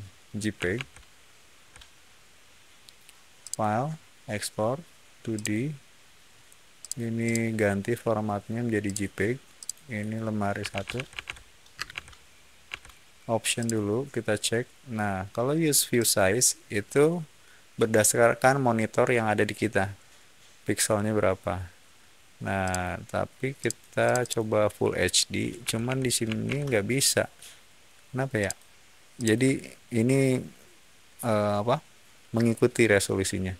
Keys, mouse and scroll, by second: 0.7 alt+Tab, 3.3 click, 5.3 click, 6.7 click, 7.1 click, 8.8 click, 9.5 click, 10.3-11.8 typing, 12.6 Tab, 13.5 click, 15.9 click, 22.5 click, 23.5 click, 23.9 click, 24.1 click, 25.3-26.9 typing, 28.3 click, 29.1 click.